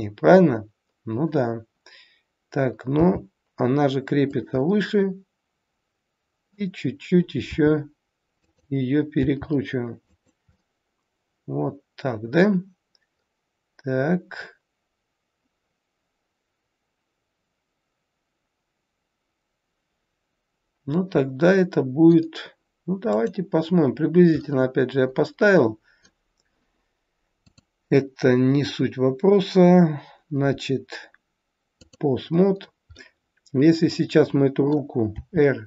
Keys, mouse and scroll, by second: 4.5 middle click, 7.5 r, 9.2 g, 10.6 middle click, 24.4 middle click, 27.4 click, 32.6-33.0 scroll down 2, 33.0 middle click, 35.0 r.